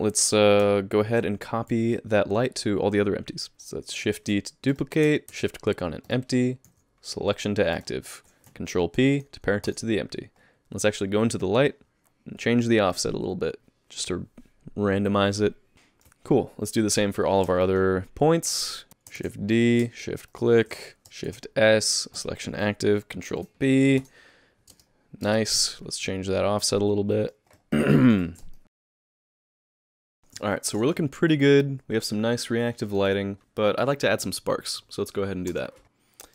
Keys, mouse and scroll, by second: 0.6 h, 17.6 middle click.